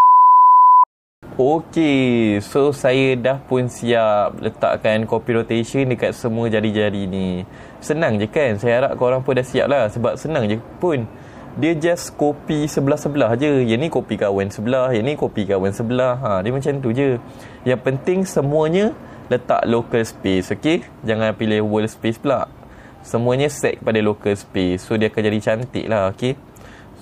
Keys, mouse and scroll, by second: 0.9-2.2 middle drag, 3.9-4.9 middle drag, 9.2 middle click, 25.5 middle click, 26.2 click.